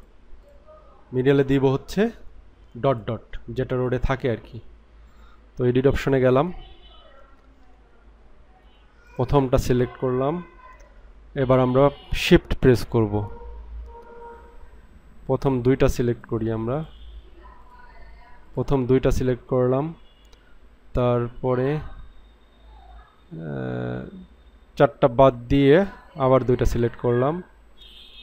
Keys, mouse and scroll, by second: 0.0 click, 2.9 click, 9.0 click, 15.3 click, 16.7 click, 18.5 shift+click, 18.6 shift+click, 25.6 shift+click, 26.4 shift+click.